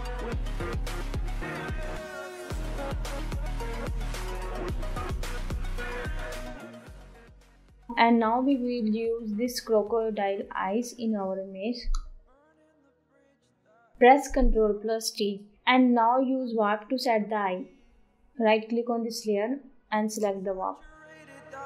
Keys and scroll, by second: 0.3 Delete, 2.7 ctrl+t.